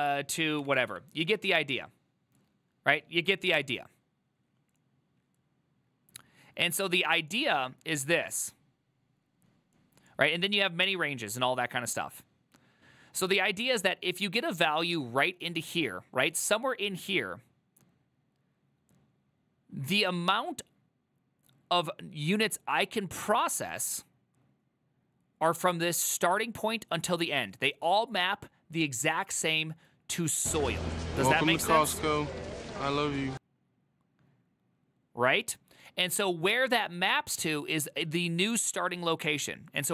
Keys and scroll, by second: 0.1-1.0 typing.